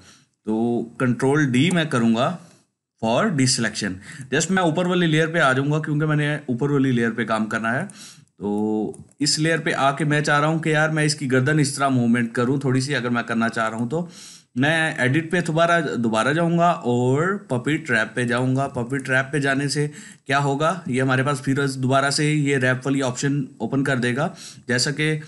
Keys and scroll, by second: 1.4 ctrl+d, 18.7 ctrl+alt+space, 19.2 ctrl+alt+space.